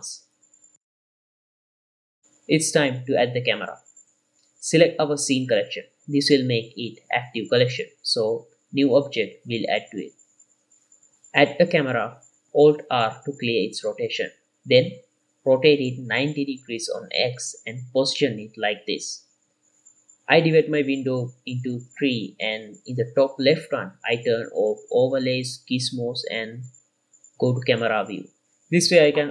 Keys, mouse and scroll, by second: 0.9 right click, 1.2-2.9 middle drag, 4.4 x, 4.4-5.2 middle drag, 5.5 shift+middle click, 7.3 click, 9.7 shift+a, 14.2 alt+r, 14.9-15.4 middle drag, 16.1 r, 16.1 x, 16.5 KP_9, 16.7 KP_0, 16.9 click, 17.3-17.7 scroll down 2, 18.8 g, 18.9 y, 20.9-24.2 drag, 25.0 click, 27.0 click, 27.5 t, 28.1 KP_0, 28.6-29.3 scroll up 4.